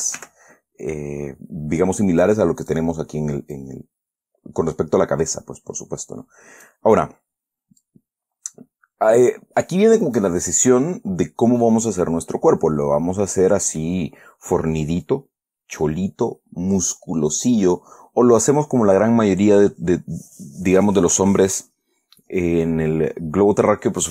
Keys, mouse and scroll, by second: 0.2 s, 0.5 y, 3.0 click, 3.9-7.2 drag, 8.2-10.7 drag, 11.9 scroll down 1, 12.4-14.3 middle drag.